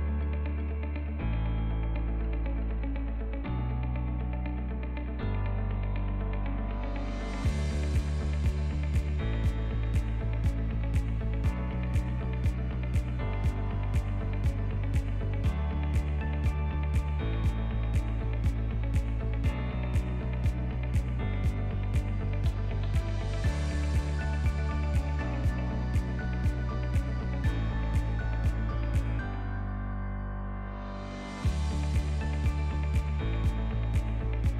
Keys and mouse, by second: 3.0-3.3 shift+middle drag, 3.8 middle click, 5.0 click, 8.6 z, 9.5 z, 10.6 middle click, 11.3 shift+middle click, 11.7-12.1 middle drag, 12.3 middle click, 12.5 click, 14.5 click, 16.7 click, 16.7-17.6 middle drag, 17.9-18.8 shift+middle drag, 19.0-19.3 shift+middle drag, 19.8 shift+middle drag, 20.3 click, 21.0 shift+middle click, 22.0 h, 22.4 click, 23.7-24.8 drag, 25.3-26.0 shift+middle drag, 30.4 alt+h, 31.0 click, 31.4 drag, 32.0 click, 33.0-33.3 drag, 34.0-34.5 drag.